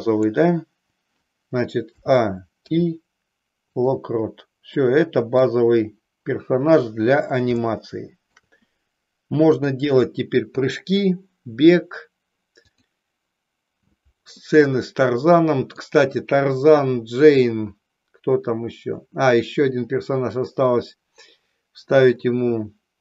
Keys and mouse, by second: 4.7 middle click, 7.6 shift+middle click, 9.5 click, 12.6 click, 14.5-15.8 middle drag.